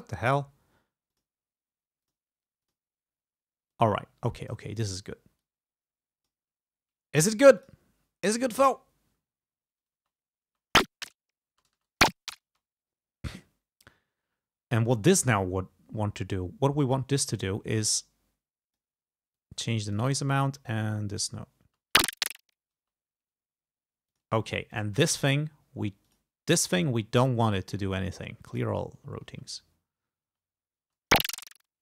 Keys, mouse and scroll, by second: 1.2 click, 2.1 click, 2.7 click, 3.8-5.1 drag, 5.5-6.5 drag, 7.6 click, 8.7 space, 10.0 space, 11.6 space, 12.6 space, 14.9 click, 17.2 click, 18.0-19.0 drag, 19.5 click, 20.5-21.6 drag, 21.7 space, 22.9 space, 24.2 click, 24.8 click, 26.2 click, 27.5 right click, 28.6 click, 29.4 space, 30.4 space.